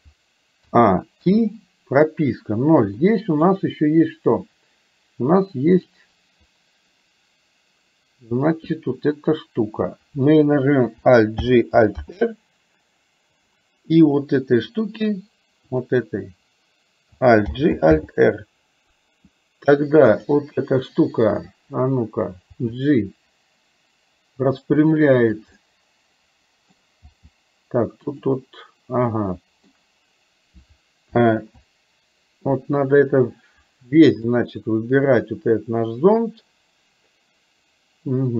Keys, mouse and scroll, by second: 0.8 a, 1.3 i, 3.0 middle click, 5.9 click, 11.4 alt+g, 12.1 alt+r, 15.9 click, 17.5 alt+g, 18.0 alt+r, 22.5 g, 25.6-26.8 middle drag, 27.0 g, 29.1-30.1 middle drag, 33.0-34.3 middle drag.